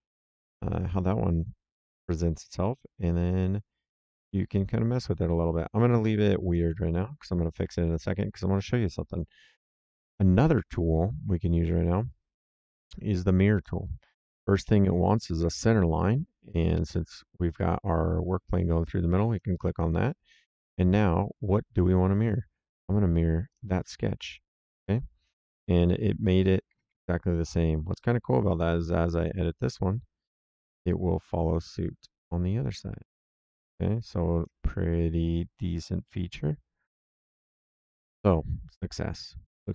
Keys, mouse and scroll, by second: 4.1 click, 13.5 click, 19.2 click, 23.4 click, 26.4 Escape, 28.6 click, 36.0 middle click.